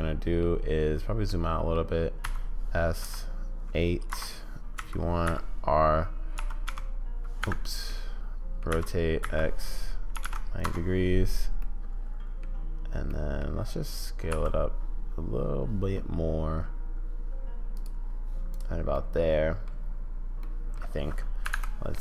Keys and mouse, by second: 1.3-1.7 middle drag, 2.3 s, 4.8 r, 7.8-8.7 middle drag, 8.7 r, 11.6-12.4 middle drag, 13.1-13.5 middle drag, 14.3 s, 18.9-19.7 middle drag, 20.4 middle click, 21.6 `.